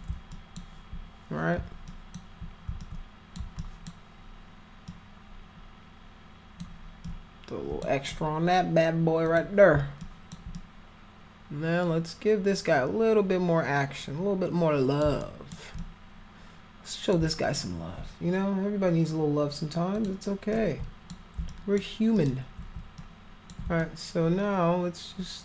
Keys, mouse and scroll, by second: 0.3 alt+click, 1.9 alt+click, 2.8 alt+click, 3.5 alt+click, 4.9-6.5 alt+drag, 7.0 click, 9.3 click, 10.0 alt+click, 10.5-15.0 drag, 15.2 alt+click, 15.8-17.1 drag, 17.4 alt+click, 19.9 click, 20.5 shift+click, 21.4 alt+click, 22.1 alt+click, 22.9 shift+click, 23.7-25.4 alt+drag.